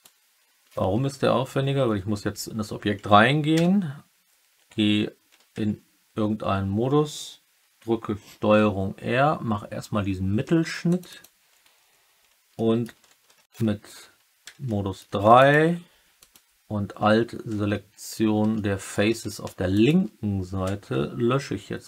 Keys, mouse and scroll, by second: 1.4 Tab, 3.5 3, 8.2 ctrl+r, 11.0 click, 12.5 alt+click, 13.2 3, 14.6 alt+click, 15.3 click, 15.4 typing, 16.2 alt+click, 17.6 alt+middle click, 17.8 alt+click, 18.5 alt+middle click.